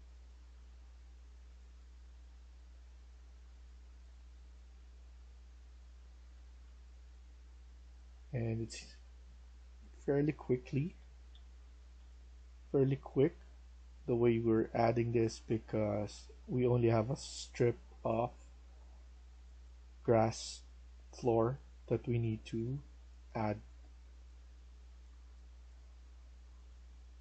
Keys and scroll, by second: 0.0-0.9 typing, 6.2-6.5 typing, 9.9-12.4 typing, 18.3-19.2 typing, 22.9 typing, 24.9 typing.